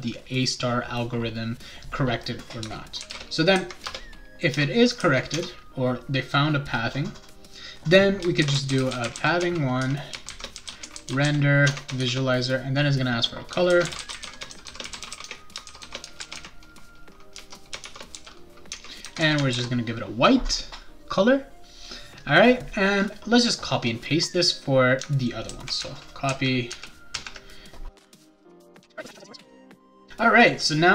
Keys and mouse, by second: 3.0 shift+[, 3.1 shift+], 3.8 Return, 4.5 shift+Return, 5.3 Tab, 8.1-12.0 typing, 13.4-19.2 typing, 18.7 Tab, 19.5 ctrl+s, 23.7-25.0 drag, 25.4 ctrl+c, 25.8 ctrl+v, 26.2 ctrl+v, 26.7 ctrl+v, 27.1 ctrl+v, 27.9 click, 28.0-29.2 typing, 28.0 click, 28.2 click, 28.3 click, 28.4 click, 28.5 click, 28.6 click.